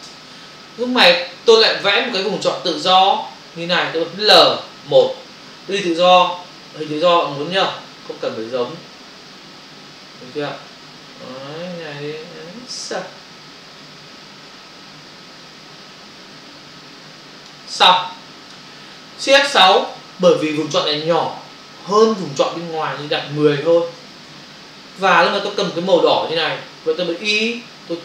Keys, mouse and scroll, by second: 0.0 Return, 6.9 click, 19.7 shift+F6, 24.2 Return.